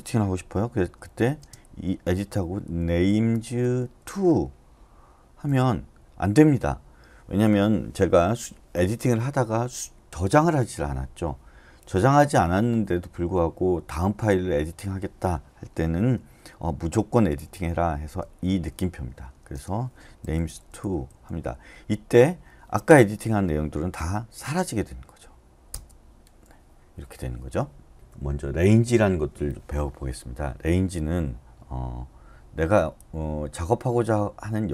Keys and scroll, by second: 1.3 typing, 2.4-4.0 typing, 5.5 Return, 17.3-18.4 typing, 19.5-21.1 typing, 25.7 Return.